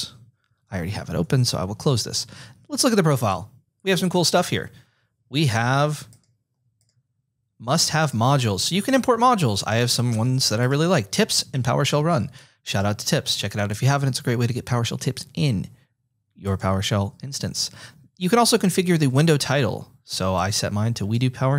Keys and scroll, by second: 0.6 Right, 1.1 alt+BackSpace.